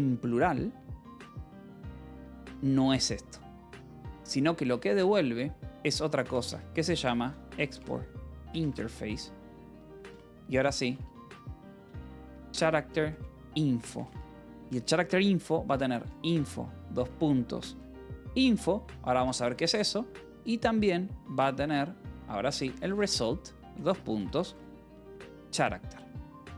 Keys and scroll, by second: 4.3 ctrl+6, 4.5-13.7 typing, 6.2 Return, 14.1 Return, 15.3-20.5 typing, 18.6 Escape, 21.6-26.4 typing, 22.0 Return.